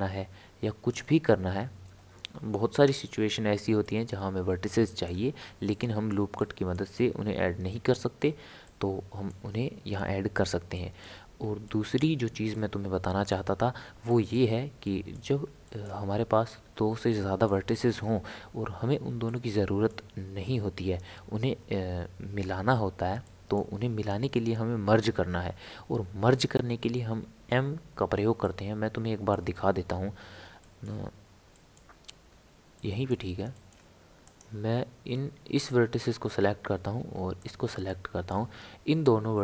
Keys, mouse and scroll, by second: 3.8-6.9 middle drag, 6.9-7.4 scroll up 3, 7.9-16.3 shift+middle drag, 16.3-17.1 scroll down 3, 17.1-22.4 middle drag, 23.3-26.3 middle drag, 28.4-32.0 middle drag, 32.0-32.7 scroll up 2, 32.7-34.2 middle drag, 34.2 click, 37.4 shift+click, 37.8-39.4 middle drag.